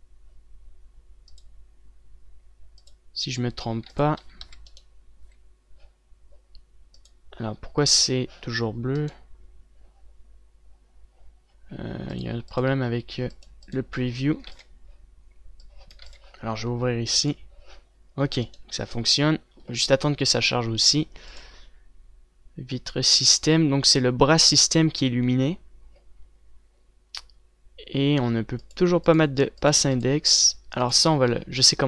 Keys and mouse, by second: 1.4 click, 4.7 ctrl+s, 4.8 z, 5.2 a, 6.0 z, 12.7-15.1 drag, 15.1 ctrl+s, 17.0 ctrl+s.